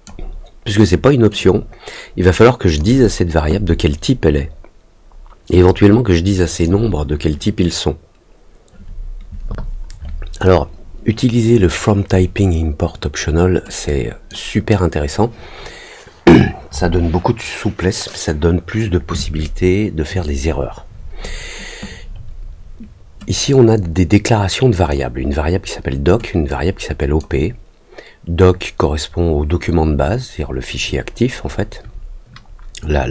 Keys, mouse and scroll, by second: 1.3-2.7 drag, 5.6 click, 13.8 click, 23.4-24.8 drag, 26.4 click.